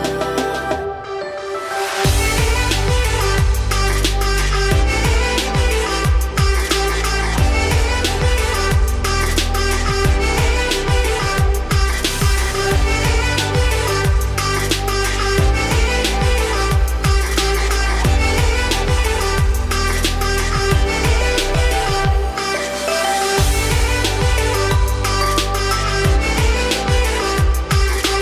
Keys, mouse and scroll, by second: 0.4-7.3 drag, 8.0 scroll down 6, 8.5 shift+middle drag, 8.9-9.5 scroll up 2, 10.1-11.5 shift+middle drag, 11.5-16.5 drag.